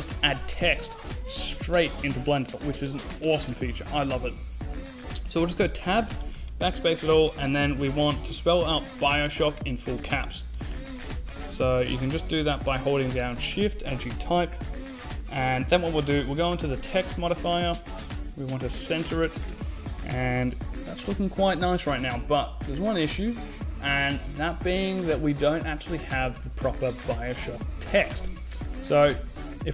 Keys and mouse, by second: 0.3 shift+a, 4.9 Tab, 5.7-6.8 BackSpace, 9.9-11.0 typing, 12.0 shift+c, 12.1 shift+k, 12.9 Tab, 14.9 click, 18.6-19.9 drag.